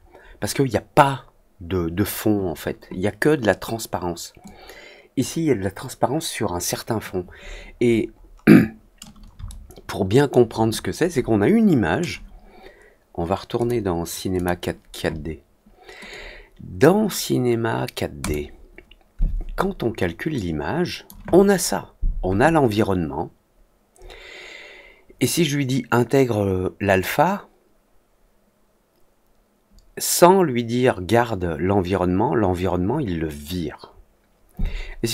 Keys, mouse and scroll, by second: 4.4 click, 7.7 middle click, 8.1 middle click, 9.5 alt+middle click, 13.5 click, 14.3 click, 16.0 click, 18.1 click, 20.3 click, 26.8 click.